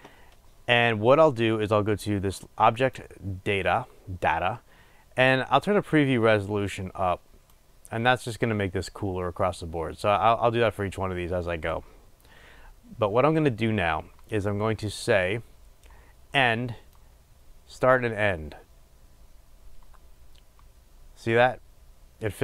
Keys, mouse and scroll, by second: 7.0-22.4 drag.